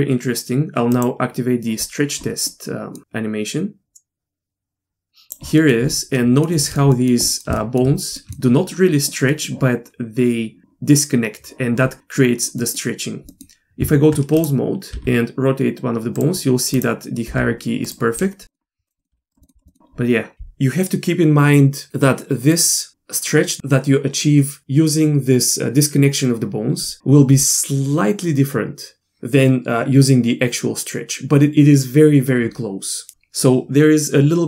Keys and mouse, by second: 0.9 click, 2.5 middle click, 3.2-5.3 drag, 5.6 middle click, 6.2-6.5 shift+middle drag, 6.6 shift+middle click, 6.9 middle click, 7.2 middle click, 7.6 shift+middle drag, 8.2 middle click, 9.3 middle click, 12.6 middle click, 13.3 middle click, 13.8 Tab, 16.4 r, 17.3 r, 20.3 r.